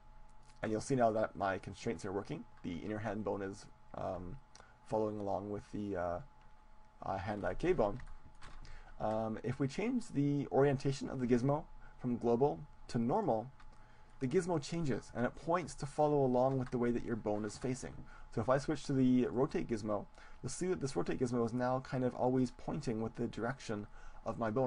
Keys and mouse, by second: 0.5-2.5 drag, 7.3-9.9 middle drag, 11.1-13.1 drag, 14.1-16.1 middle drag, 19.3-23.0 drag, 23.3-24.6 drag.